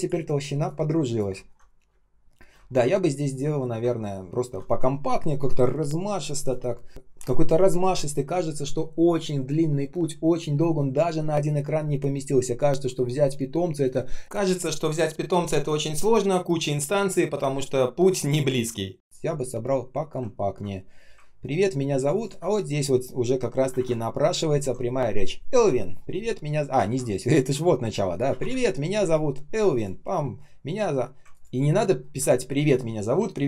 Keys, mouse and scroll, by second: 0.2 space, 1.3 ctrl+scroll down 1, 1.8 space, 2.3 space, 2.3 space, 2.6 ctrl+scroll down 1, 3.6 ctrl+scroll up 1, 20.2 ctrl+scroll up 1, 21.5 ctrl+scroll up 1, 22.0 ctrl+click, 23.7 ctrl+alt+-, 26.7 ctrl+я, 28.2 ctrl+alt+-, 28.4 space, 31.2 ctrl+click, 31.4 ctrl+click, 31.9 ctrl+scroll down 1.